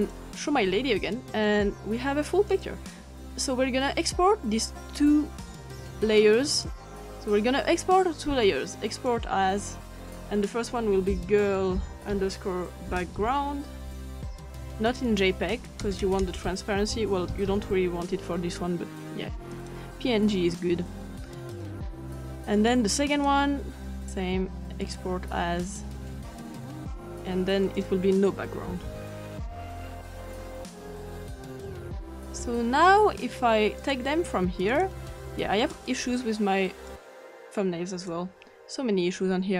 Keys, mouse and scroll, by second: 2.5 click, 6.5 click, 7.1 click, 8.9 click, 9.4 click, 10.7-13.2 typing, 15.1 click, 15.7 click, 15.8-18.0 typing, 16.0 click, 19.5 click, 21.5 click, 22.6 click, 23.2 click, 24.8 click, 26.9 click, 27.7 click, 27.8-28.9 drag, 28.5-29.4 typing, 30.5 click, 31.3 click, 31.6 click, 34.2 click, 34.7 click, 35.6 ctrl+click, 36.9-38.2 drag.